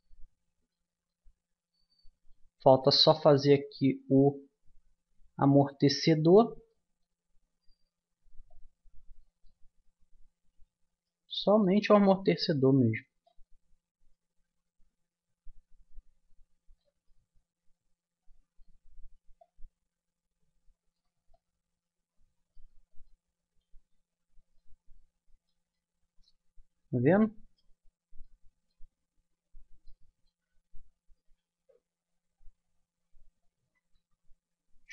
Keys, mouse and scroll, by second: 8.5-9.6 drag, 9.6-16.5 middle drag, 12.5 click, 16.9-21.0 middle drag, 21.3-23.4 middle drag, 27.2 middle click, 28.2-31.8 middle drag, 33.5 a, 33.9 a.